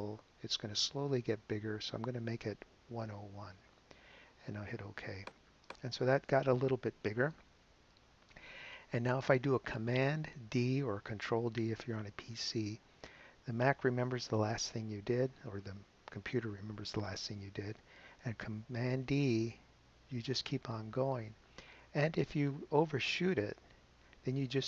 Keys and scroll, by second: 2.3-3.8 typing, 19.5 super+d, 22.9 super+d.